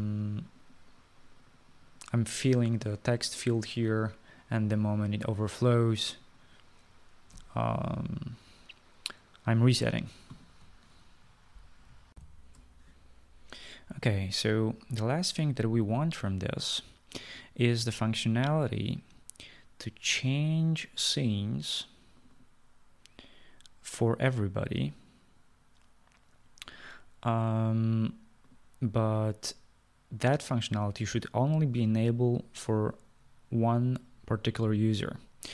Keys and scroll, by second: 8.4 d, 13.3 shift+F9, 13.4 shift+F9.